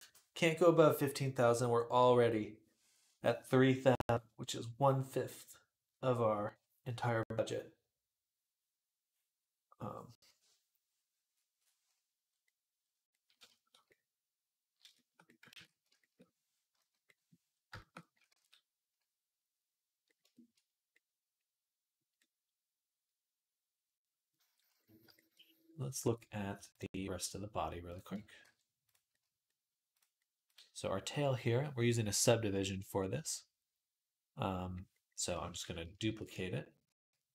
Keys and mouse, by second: 15.9 ctrl+shift+s, 16.6 /, 18.7 ctrl+s, 20.4-24.9 right drag, 24.8 shift+middle click, 24.9 shift+click, 25.1-27.9 right drag, 27.0 click, 27.9 alt+click, 28.2 alt+h, 28.3-37.0 right drag, 29.7 click, 30.2 click, 30.2 middle click, 35.8 shift+d, 37.0-37.3 middle drag.